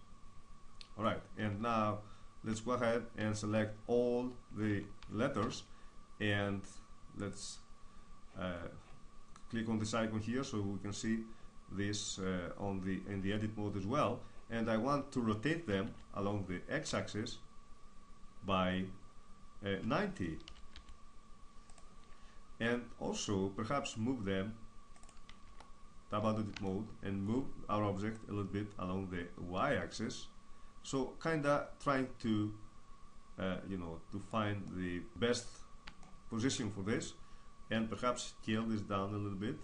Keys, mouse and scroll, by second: 1.2 Tab, 2.2 Tab, 2.9 Tab, 4.3 a, 4.7 a, 5.1 a, 6.9 click, 7.6-10.0 middle drag, 10.4-14.3 middle drag, 15.5 r, 21.4-23.1 drag, 23.6-25.1 drag, 25.1 Tab, 27.8-32.9 drag, 34.3-38.1 middle drag, 38.1 s.